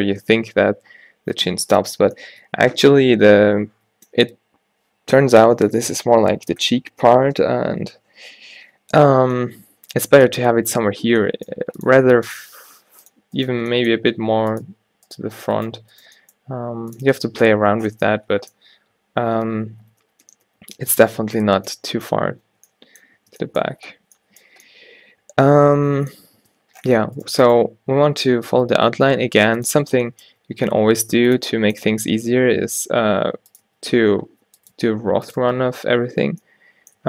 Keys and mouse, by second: 2.2 middle click, 11.1 g, 12.1 r, 12.8 r, 13.7 g, 15.4 g, 16.2 g, 17.2 a, 19.9 ctrl+z, 20.1 ctrl+z, 20.3 ctrl+z, 20.6 ctrl+z, 20.8 ctrl+z, 21.1 ctrl+z, 21.4 ctrl+z, 21.8 ctrl+z, 22.1 ctrl+z, 22.7 middle click, 23.3 Tab, 24.4-24.7 middle drag, 26.5 Tab, 28.3 e, 30.6 e, 32.6 e, 33.7 e, 34.8 e, 35.5 Tab, 36.0 a, 36.2 a.